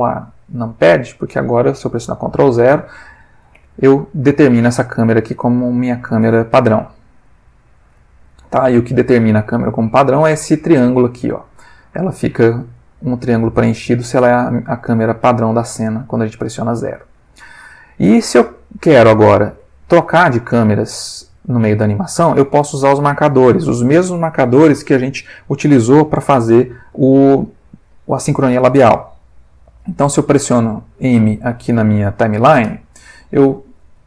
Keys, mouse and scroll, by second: 0.2 click, 2.0 ctrl+0, 3.5 g, 4.5 click, 5.4 g, 5.9 click, 6.9 middle click, 7.4-9.2 middle drag, 9.6 click, 16.1 click, 17.2-18.5 middle drag, 18.6-19.7 ctrl+middle drag, 32.7 m.